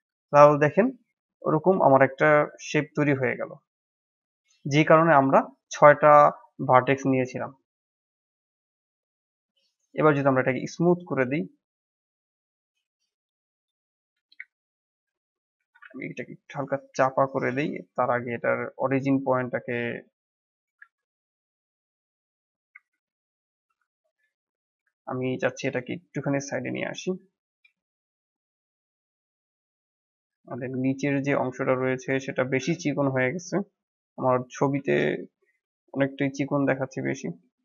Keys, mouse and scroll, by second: 3.3-6.1 middle drag, 6.1 scroll down 3, 6.4-7.9 middle drag, 7.9 Tab, 8.4-9.7 middle drag, 9.7-11.5 right drag, 11.5 click, 11.8-13.1 right drag, 13.1 drag, 13.5-14.2 drag, 14.2 KP_1, 15.0-15.5 scroll up 2, 15.5 s, 17.3-20.5 right drag, 20.5 s, 22.5-22.9 scroll up 1, 22.9 Tab, 23.2 scroll down 4, 23.6 Tab, 23.9 scroll down 1, 24.4-24.8 drag, 24.8-25.6 shift+middle drag, 25.6-26.6 drag, 27.2 drag, 27.4 scroll up 1, 27.7-28.2 shift+middle drag, 28.2 click, 28.6 scroll up 2, 29.0-29.6 shift+middle drag, 29.6 Tab, 30.5 Tab, 30.9 click, 34.7 shift+a, 36.4 Tab, 36.8 click.